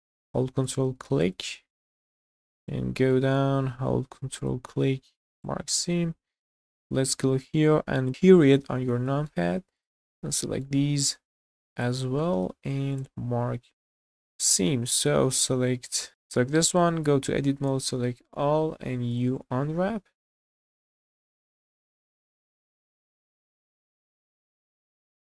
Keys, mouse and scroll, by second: 0.6 ctrl+click, 1.3 shift+scroll down 1, 1.3 shift+middle click, 2.0 shift+middle click, 2.7 shift+middle click, 4.4 ctrl+click, 5.1 q, 6.6 click, 8.1-8.6 scroll down 2, 8.1 KP_Decimal, 8.7 scroll down 2, 9.0 shift+middle click, 9.8 click, 10.2 middle click, 10.9 scroll up 1, 11.7 ctrl+click, 12.4 q, 13.6-14.5 scroll down 4, 14.5 middle click, 14.7-15.1 scroll down 3, 15.2 shift+middle click, 15.5 middle click, 16.1 Tab, 16.1 click, 16.1 a, 16.9 Tab, 17.6 a, 18.6 u, 20.5 Tab, 20.7 click, 20.8 Tab, 20.9-21.4 scroll up 3, 21.0 shift+middle click, 21.1 middle click, 21.4 shift+middle click, 21.8 alt+click, 22.0 alt+click, 22.4 alt+click, 22.7 q, 23.1 shift+middle click, 23.5 alt+click, 23.7 scroll down 1, 23.8 middle click, 24.2 alt+shift+click, 24.4 q, 24.6 shift+middle click, 24.8 middle click, 24.9-25.3 scroll up 2.